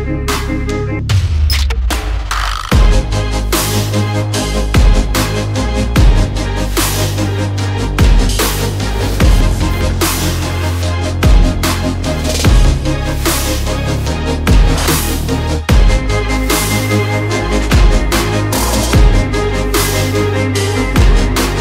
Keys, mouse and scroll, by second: 1.3 click, 2.2 alt+scroll up 1, 2.7 click, 6.2 click, 9.5 alt+scroll up 1, 9.9 click, 11.0 alt+click, 11.9 alt+scroll down 3, 12.4 alt+click, 13.2 alt+scroll up 1, 13.9 click, 15.5 r, 16.0 s, 16.3 ., 17.4 space, 18.4-19.2 typing, 20.1 Return, 21.2-21.6 typing.